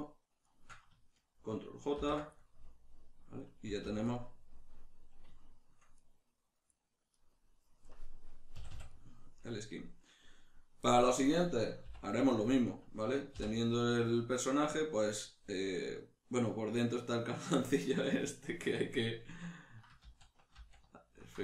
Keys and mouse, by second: 0.5 shift+right click, 2.0 ctrl+j, 2.4-7.1 middle drag, 3.6 a, 7.1 right click, 7.8 KP_Decimal, 8.5 a, 8.9-12.7 middle drag, 11.9 h, 12.7 right click, 13.3 h, 16.7 right click, 20.1 ctrl+z, 20.1-21.4 middle drag.